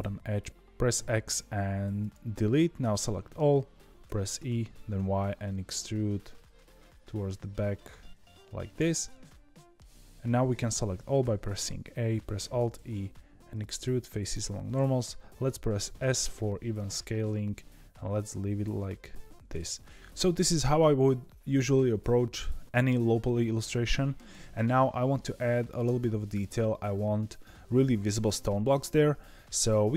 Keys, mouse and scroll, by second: 0.5 ctrl+z, 0.9 x, 3.0 middle click, 4.0 e, 9.2-11.1 middle drag, 11.1 a, 12.3 alt+e, 19.8 scroll down 1.